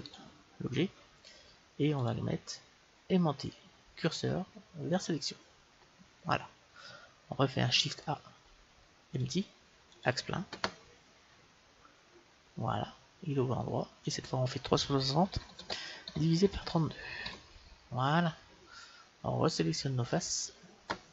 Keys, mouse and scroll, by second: 0.0-1.9 right drag, 1.9-3.1 drag, 7.7 shift+a, 11.3-14.1 middle drag, 14.1-16.0 drag, 19.5-21.1 right drag, 20.1 middle click.